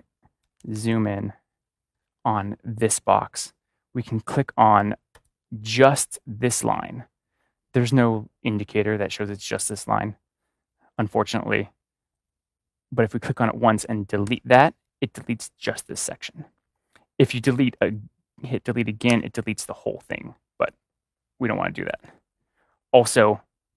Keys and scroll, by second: 0.5 ctrl+=, 14.2 ctrl+=, 19.0 BackSpace, 21.8 BackSpace, 22.0 ctrl+z, 22.9 ctrl+z.